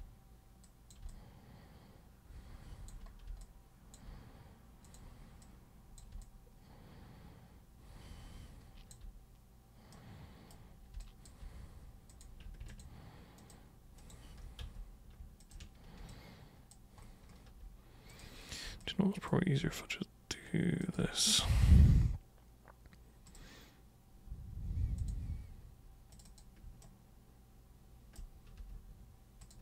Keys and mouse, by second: 0.6 super+click, 1.1-2.9 alt+super+drag, 3.4 alt+super+click, 4.8 super+click, 5.4 super+click, 6.2-8.9 alt+super+drag, 9.9 super+right click, 11.0 super+space, 11.0 click, 12.1 super+click, 12.7 ctrl+shift+super+click, 13.4 ctrl+shift+super+click, 14.0 ctrl+shift+super+click, 14.6 ctrl+super+z, 15.4 ctrl+shift+super+click, 16.1 alt+super+click, 18.1 super+click, 18.8-19.3 alt+super+drag, 20.8 ctrl+shift+super+click, 23.3 super+click, 25.0 super+click, 26.1 super+click, 26.8-28.1 shift+super+right drag, 29.4 super+click.